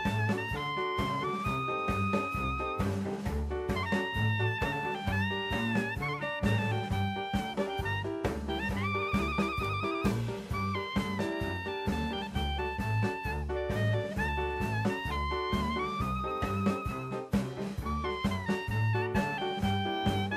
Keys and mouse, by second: 2.1 click, 2.8 ctrl+z, 3.3 ctrl+z, 6.2 click, 7.4 click, 10.1 click, 11.2-12.0 middle drag, 13.2 KP_0, 14.2 n, 15.8 click, 16.5 click, 17.1-17.7 middle drag, 18.3 shift+middle click, 18.7-19.9 middle drag, 20.1-20.3 shift+middle drag.